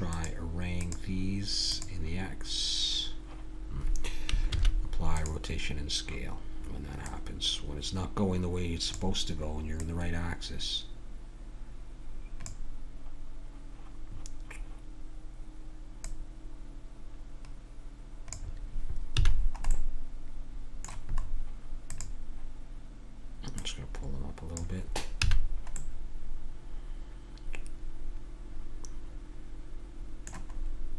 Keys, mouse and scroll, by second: 0.1-2.6 drag, 4.5 ctrl+a, 7.0-8.7 drag, 9.8-11.6 drag, 16.0-18.2 drag, 19.1 a, 19.3 middle click, 19.9-21.9 middle drag, 21.9 click, 25.2 a, 26.0-27.0 middle drag, 27.6 middle click.